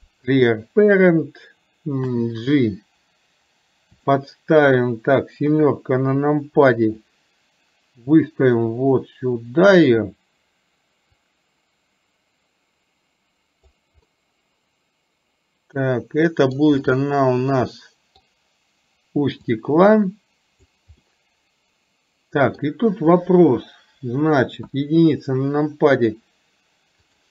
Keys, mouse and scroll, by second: 5.5 KP_7, 7.1-10.0 drag, 11.3 click, 11.7-13.7 drag, 14.2-15.8 middle drag, 16.0 middle click, 16.3 scroll up 1, 16.5 middle click, 16.9-17.6 scroll up 1, 17.6 middle click, 19.5-20.7 drag, 21.2-22.7 middle drag, 24.8 KP_1.